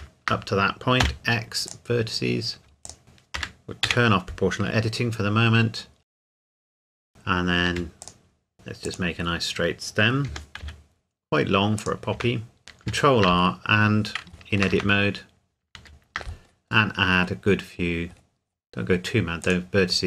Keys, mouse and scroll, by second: 1.0 x, 1.7 click, 2.8 alt+click, 3.0 s, 3.4 Escape, 3.8 o, 4.6 s, 6.0 click, 6.1-8.5 typing, 6.3 click, 6.6 click, 6.8 click, 7.2-7.7 scroll down 1, 8.0 click, 8.8 click, 9.2-10.3 scroll down 1, 10.3 g, 10.6 z, 11.8 click, 12.2 Tab, 12.6 scroll up 1, 12.8 ctrl+r, 13.4-14.0 scroll up 1, 14.0 scroll down 1, 14.7 Tab, 15.2-15.6 scroll up 1, 15.8 ctrl+r, 16.3-18.1 scroll up 1, 18.1-19.3 scroll down 1, 19.4 click.